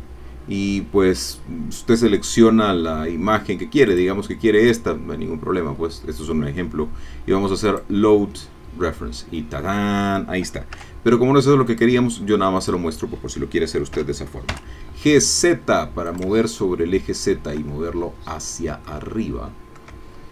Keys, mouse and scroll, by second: 2.7-3.9 scroll up 1, 3.9 click, 7.7 click, 8.8-10.3 scroll down 1, 10.7 x, 11.7 click, 12.6 click, 14.0 g, 14.5 z, 16.1 shift+click, 16.5-18.0 shift+middle drag, 18.2 scroll down 2, 18.9-20.0 shift+middle drag, 20.2 shift+middle click.